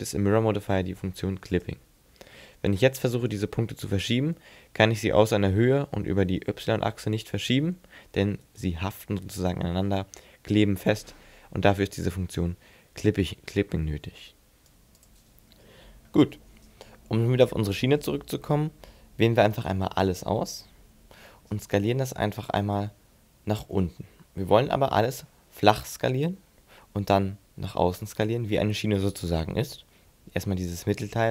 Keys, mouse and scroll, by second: 1.6 click, 3.3 g, 8.6 right click, 19.2 right click, 19.7 a, 20.1 a, 23.5 middle click.